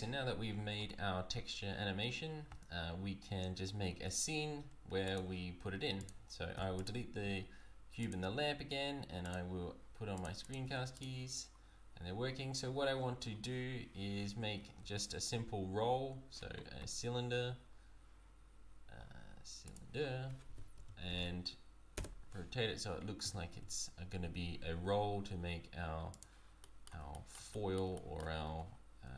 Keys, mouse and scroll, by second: 11.0 click, 14.8 shift+a, 20.5 r, 23.2 s, 26.6 middle click, 27.1 shift+middle click, 27.5 middle click, 27.9 shift+middle click, 28.5 Tab.